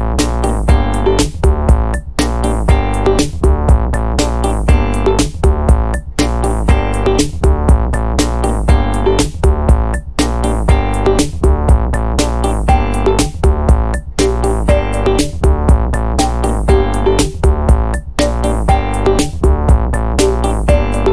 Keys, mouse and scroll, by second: 0.0 click, 2.2 click, 4.9 click, 6.4 5, 6.6 0, 7.8 click, 8.7 click, 9.6 5, 9.9 0, 11.1 click, 12.2 0, 13.0-13.5 scroll down 2, 14.3-14.6 scroll up 2, 14.9-15.3 scroll down 1, 15.7 scroll up 1, 16.5 scroll down 2, 18.5 click, 19.8 click.